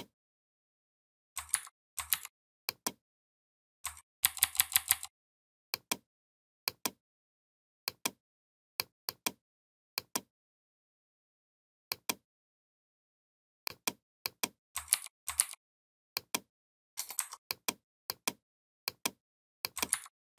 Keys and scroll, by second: 1.3 ctrl+c, 1.9 ctrl+v, 4.1 ctrl+[, 14.7 ctrl+g, 15.2 ctrl+g, 19.7 ctrl+c, 20.2 ctrl+v.